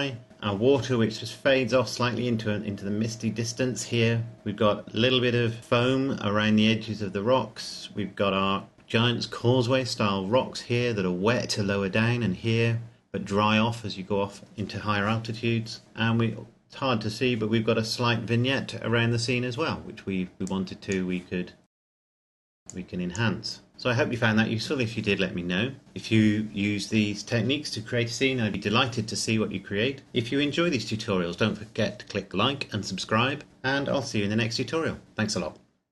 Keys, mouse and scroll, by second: 16.9-18.7 scroll down 1, 20.3 click, 22.3-22.7 scroll up 1, 22.7 click.